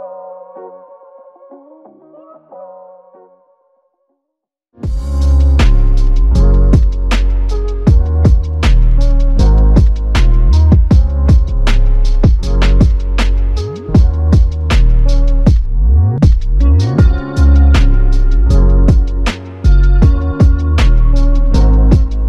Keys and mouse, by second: 0.5 alt+click, 0.7 ctrl+click, 9.7 double click.